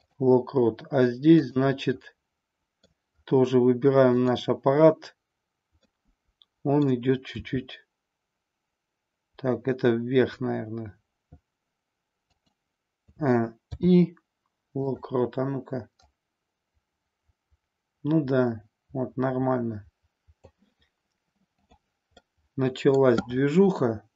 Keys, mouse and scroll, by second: 1.5 click, 2.1-2.8 middle drag, 5.8-6.8 middle drag, 7.2 r, 12.3 click, 12.9 a, 13.7 i, 15.9-20.4 drag, 22.2-23.0 middle drag.